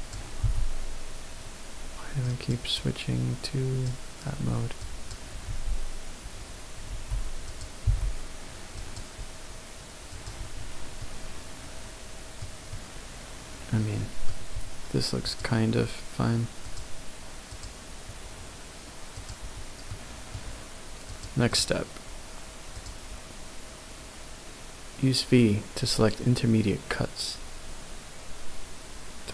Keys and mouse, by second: 0.4 b, 2.9-3.8 drag, 4.8 click, 5.4 b, 7.8 g, 8.8 click, 10.1 click, 11.0 middle click, 12.7-13.8 middle drag, 19.9 middle click.